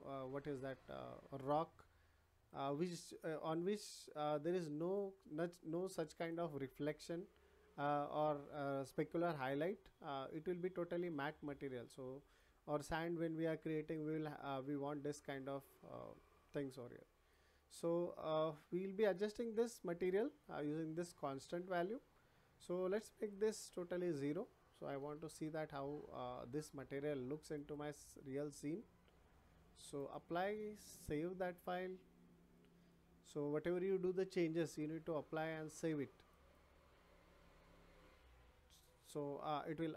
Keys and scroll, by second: 24.9 0, 25.3 Return.